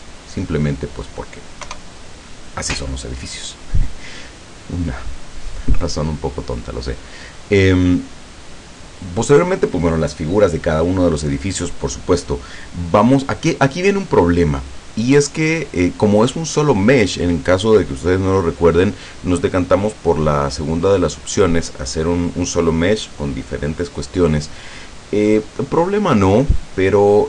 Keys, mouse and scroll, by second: 0.6 middle click, 1.6 KP_0, 6.6 right click.